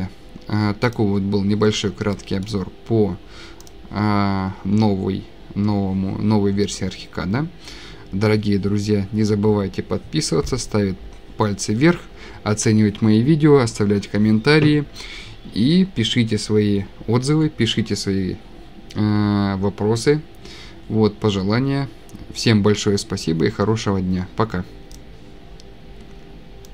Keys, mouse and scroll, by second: 1.9 scroll up 6, 2.1-2.5 scroll, 25.0 click.